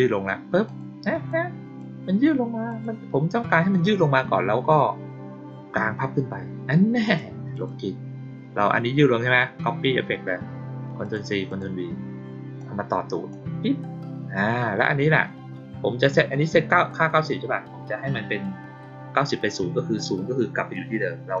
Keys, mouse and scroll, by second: 0.6 click, 1.2-1.7 drag, 2.6 click, 3.6 click, 7.0 click, 7.5 click, 10.9 click, 11.4 click, 12.5-13.2 drag, 14.3 click.